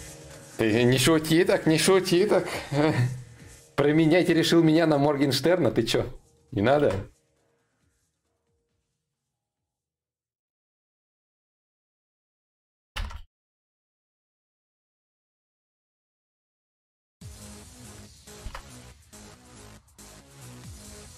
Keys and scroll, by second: 16.3 ctrl+z, 18.1 ctrl+z.